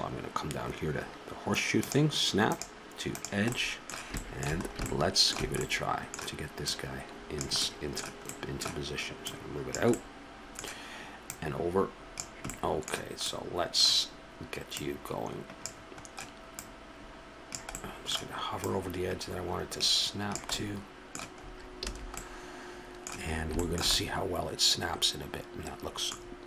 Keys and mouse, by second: 1.8-3.5 drag, 3.5-4.5 middle drag, 6.6-7.4 middle drag, 7.4-11.0 drag, 11.2 drag, 11.3-12.2 middle drag, 12.2 click, 12.5-13.3 middle drag, 14.7-15.6 middle drag, 15.6-17.7 drag, 17.7-20.1 middle drag, 20.1 click, 21.8 a, 24.1-24.8 middle drag, 24.9 middle click, 25.2-25.7 middle drag.